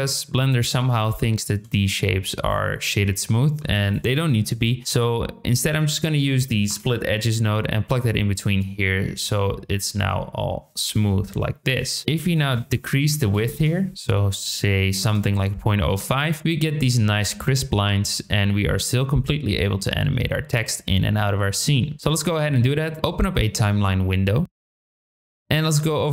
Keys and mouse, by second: 1.1 shift+middle drag, 2.3 click, 3.4 shift+a, 11.3 KP_7, 12.3-13.9 drag, 14.2 middle click, 15.0 KP_0, 19.3-21.7 drag, 24.5 click, 24.8 click, 25.0 drag.